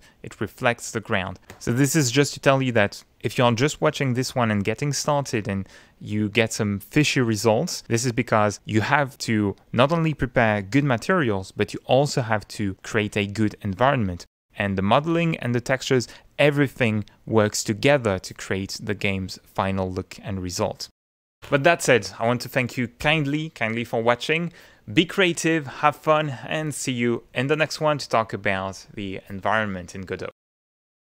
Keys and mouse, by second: 5.8 middle click.